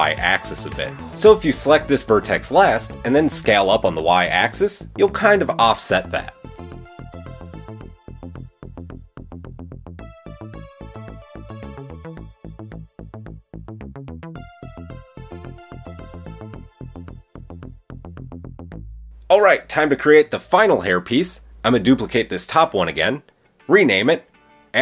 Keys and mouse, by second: 1.6 a, 2.6 shift+a, 5.5 s, 8.6-10.1 drag, 9.7 Tab, 10.1 middle click, 10.8 click, 10.8-12.0 middle drag, 12.0 click, 12.1-18.0 shift+middle drag, 13.3 Tab, 14.1 Tab, 18.0 click, 18.1-19.1 shift+middle drag, 19.1 click, 19.8 Tab, 21.0 Tab, 22.0 shift+d, 23.1 click, 23.2 click, 23.4-24.4 middle drag, 24.4-24.8 drag.